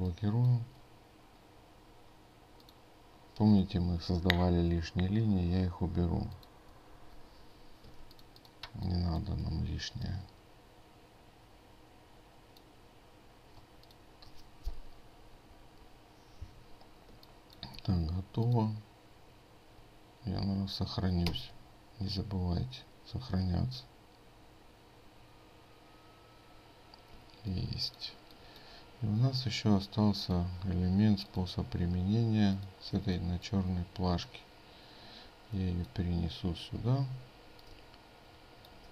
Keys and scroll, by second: 8.0 ctrl+space, 21.3 ctrl+s.